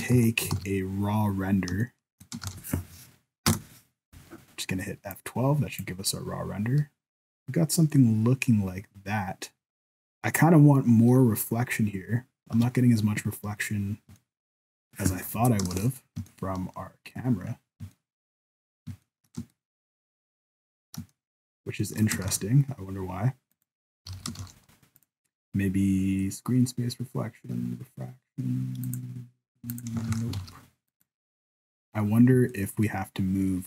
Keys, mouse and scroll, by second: 0.1 ctrl+s, 0.6 alt+a, 1.3-1.6 scroll up 1, 1.6 scroll down 1, 1.8 shift+middle click, 2.4 ctrl+s, 4.9 F12, 13.5-13.9 scroll up 2, 13.9-14.2 scroll down 1, 14.2 middle click, 15.3 KP_0, 15.8 ctrl+s, 16.3 shift+middle click, 17.6 scroll down 1, 17.9 shift+middle click, 18.3 scroll up 1, 19.1 shift+middle click, 19.5 ctrl+middle click, 21.1 shift+middle click, 22.3 ctrl+s, 23.5 right click, 24.1 alt+a, 24.4 ctrl+s, 25.0 click, 28.9 click, 29.7 click, 30.1 ctrl+s, 30.4 alt+a, 30.9 right click, 31.4 scroll down 2, 31.8-32.4 scroll up 2, 32.5 shift+middle click.